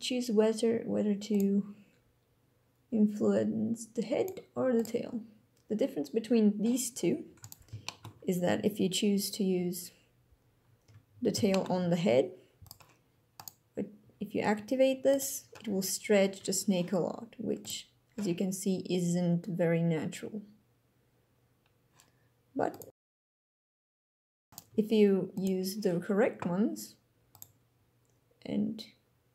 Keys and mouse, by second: 1.3 middle click, 4.2 middle click, 4.7 middle click, 7.4 click, 7.8 shift+click, 11.5 shift+click, 11.8 g, 13.3 click, 14.0 g, 15.1 click, 22.7 click, 24.4 right click, 24.7 g, 25.3 click.